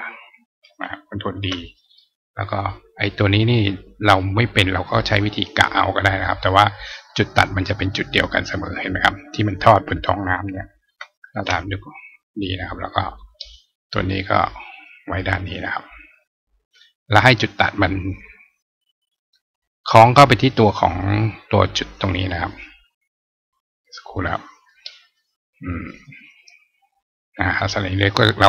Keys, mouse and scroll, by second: 2.3 click, 3.8-4.9 drag, 6.3 click, 13.0 click, 14.3-15.3 drag, 26.2 click.